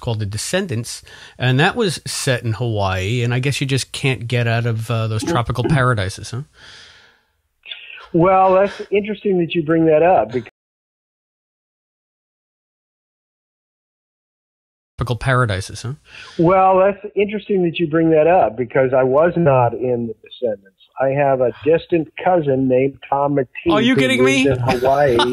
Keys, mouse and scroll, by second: 0.6 click, 1.5 click, 2.4 click, 3.9 click, 4.6 click, 6.0-8.8 drag, 9.5 click, 10.4 space, 10.8 click, 11.8 Delete, 12.1 click, 13.1-14.3 drag, 14.8 click, 14.9 space, 17.0 click, 17.5 click, 18.1 click, 18.7-19.8 drag, 20.1 click, 22.2 click, 24.0 click.